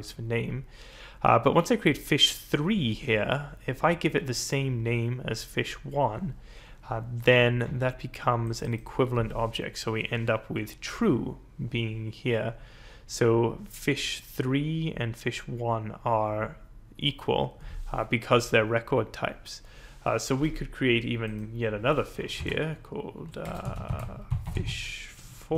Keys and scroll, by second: 22.4 Return, 23.0-25.5 typing.